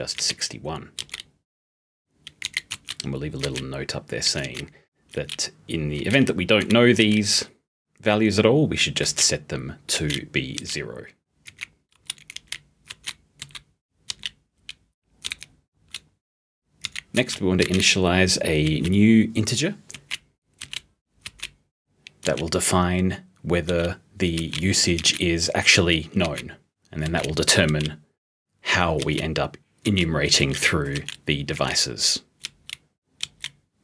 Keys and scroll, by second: 0.0-1.1 typing, 2.5-5.2 typing, 6.6 *, 10.6 o, 11.5 o, 12.0 p, 16.8 h, 17.6 *, 31.6 o.